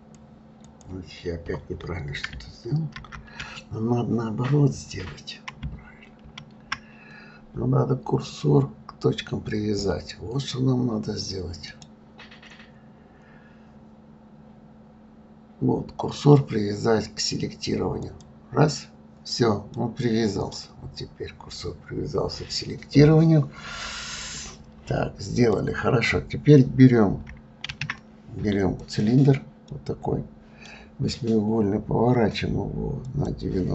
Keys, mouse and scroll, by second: 2.9 ctrl+z, 6.2 shift+a, 11.7-14.6 right drag, 19.7-22.7 middle drag, 23.0-23.7 scroll down 3, 23.7-24.8 scroll down 2, 25.3 click, 27.6 shift+a, 29.7-32.7 middle drag, 33.1-33.7 drag.